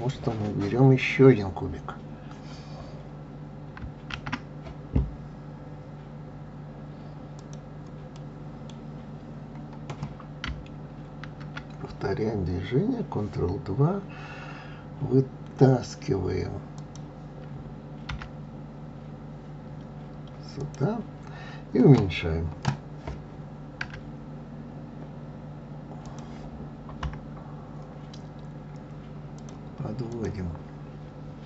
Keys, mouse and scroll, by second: 4.1 shift+a, 8.1-11.1 middle drag, 11.2 ctrl+2, 16.8 click, 18.1 g, 27.0 KP_3, 28.4-29.2 scroll up 1, 29.3 click, 30.1 click.